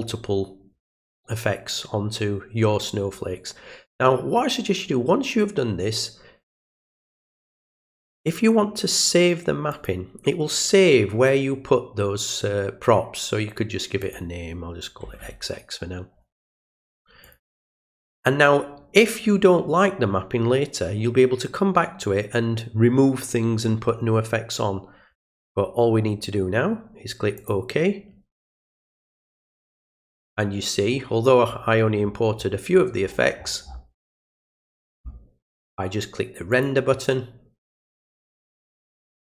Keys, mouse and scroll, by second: 9.7 click, 14.0 click, 17.3 click, 27.4 click, 31.5 middle click, 32.1 middle click, 32.1 scroll down 1, 32.8-33.4 scroll down 2, 33.4 scroll up 1, 33.5 scroll down 1, 36.5 click.